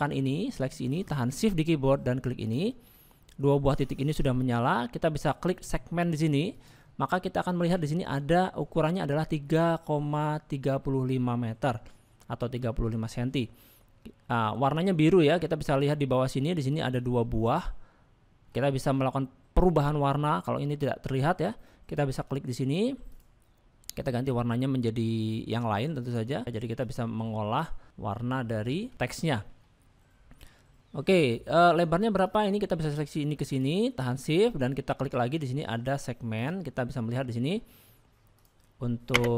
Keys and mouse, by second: 2.4 shift+click, 6.5 click, 7.8 shift+middle click, 18.7 shift+middle click, 19.8 middle click, 23.1 click, 28.9 middle click, 29.2 shift+middle click, 30.0-31.6 middle drag, 38.3 click.